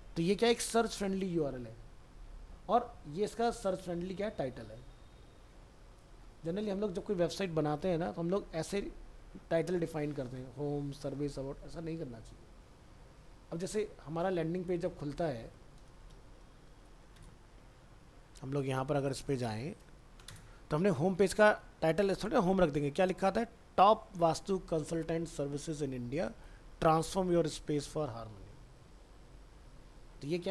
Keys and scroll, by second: 16.1 ctrl+shift+n.